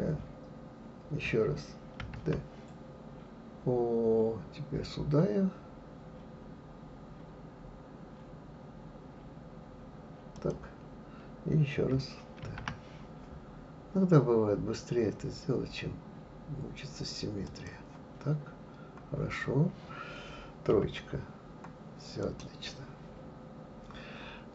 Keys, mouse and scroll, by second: 2.0 shift+d, 12.4 shift+d, 20.7 KP_3, 22.2 click.